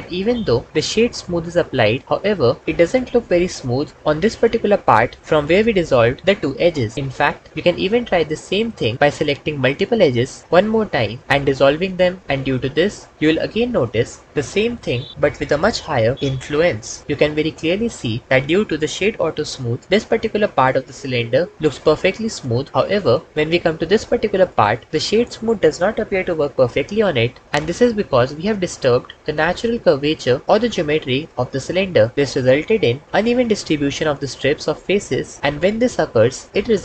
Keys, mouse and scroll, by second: 7.5 Tab, 12.2 Tab, 28.4 Tab.